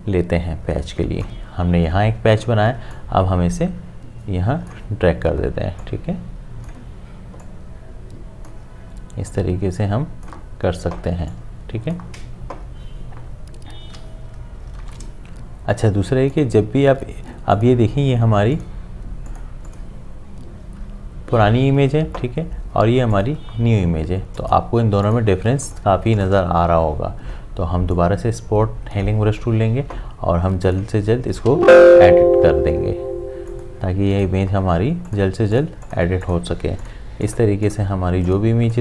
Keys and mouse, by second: 14.8 ctrl+d, 16.3 click, 23.1-30.7 drag, 31.5 `, 33.5 click.